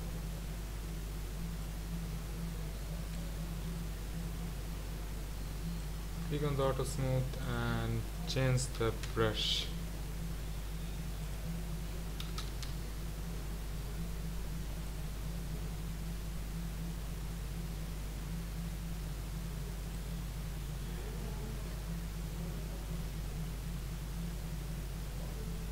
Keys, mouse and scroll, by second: 1.6-3.7 drag, 3.7 ctrl+z, 9.1-17.9 drag, 20.3-23.3 middle drag, 23.3 scroll down 2, 23.7-25.7 middle drag.